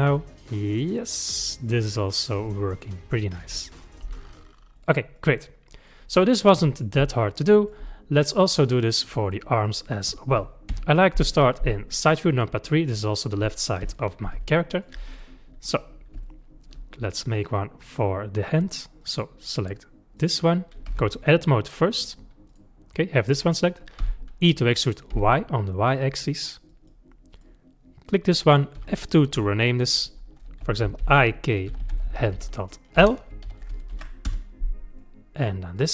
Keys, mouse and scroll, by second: 2.8-3.9 middle drag, 3.9 click, 4.0 g, 5.2-8.0 middle drag, 8.0 scroll down 2, 8.6-9.6 middle drag, 9.6 click, 10.7 KP_3, 12.1-13.8 middle drag, 13.8 KP_3, 14.5-15.1 shift+middle drag, 15.1-16.2 scroll up 5, 16.2-17.2 shift+middle drag, 17.2 click, 17.9 click, 19.0 click, 19.6 click, 20.2 click, 20.9 Tab, 22.5 click, 24.0 e, 27.3 click, 28.8 F2, 35.0 middle click, 35.8 click.